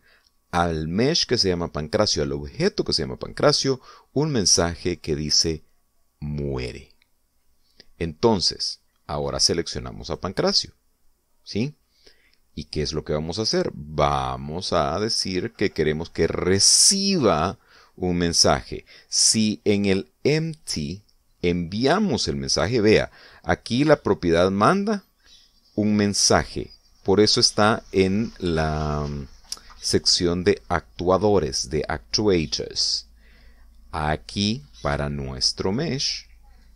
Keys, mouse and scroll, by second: 11.0 right click, 14.5 click, 17.5 click, 21.3 right click, 35.4 click.